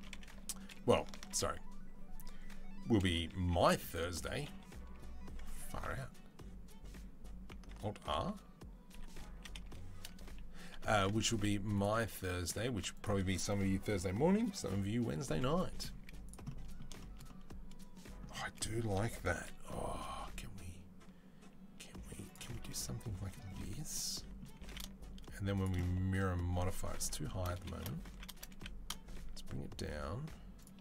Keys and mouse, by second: 1.1 ctrl+z, 2.8 r, 4.2 KP_3, 8.0 alt+r, 8.7 r, 10.5-30.8 shift+middle drag, 11.1 g, 11.7 r, 12.3 g, 15.8 z, 18.7 KP_7, 19.7 g, 24.3 g, 26.7 KP_3, 27.3 g.